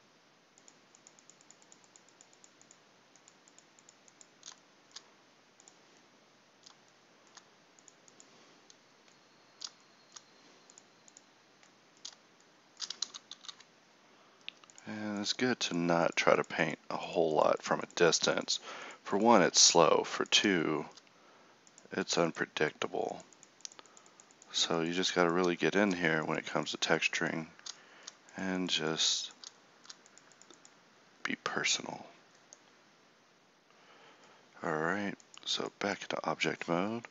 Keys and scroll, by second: 13.1 ctrl+z, 13.4 ctrl+z.